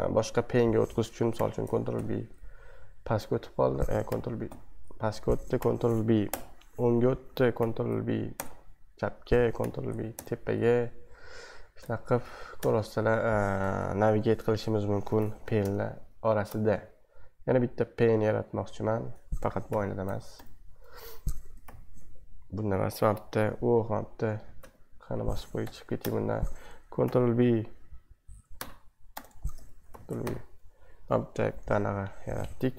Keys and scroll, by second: 0.0 super+1, 1.3 b, 1.9 Down, 4.1 ctrl+b, 4.5 Down, 5.6 ctrl+b, 6.3 Right, 7.6 b, 8.3 Left, 9.6 b, 10.1 Up, 11.5-13.0 typing, 14.8-17.0 typing, 19.7 ctrl+b, 20.3 Right, 21.6 ctrl+b, 21.9-22.5 typing, 24.6-27.5 typing, 28.6-30.2 typing, 29.9 ctrl+b.